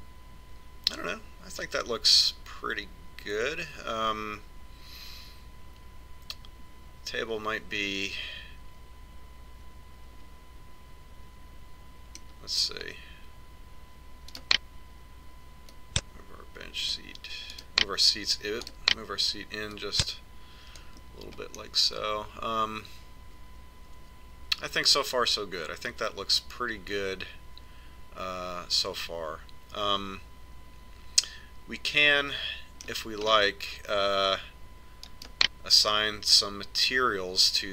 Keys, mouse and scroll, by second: 14.4-15.9 right drag, 15.9 click, 16.2 middle click, 17.7 right click, 19.9 click, 21.7-23.6 middle drag, 33.5-35.3 middle drag, 35.3 right click.